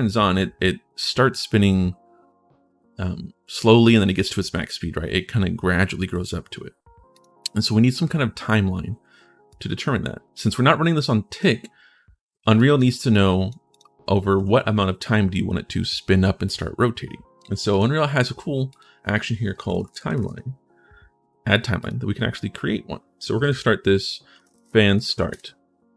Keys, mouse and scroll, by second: 6.9 click, 9.3-10.9 drag, 11.1 click, 12.3 click, 12.9 click, 13.5 click, 17.5 right click, 18.5 click, 19.7 e, 20.0 e, 21.5 click, 23.9-25.5 typing.